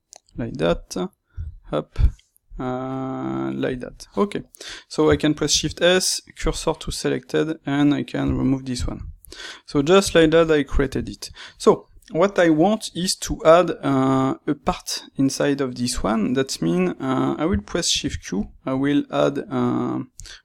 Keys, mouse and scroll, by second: 0.3 click, 1.3 g, 3.7 click, 4.0-20.4 middle drag, 6.4 shift+s, 8.3 x, 20.2 shift+q.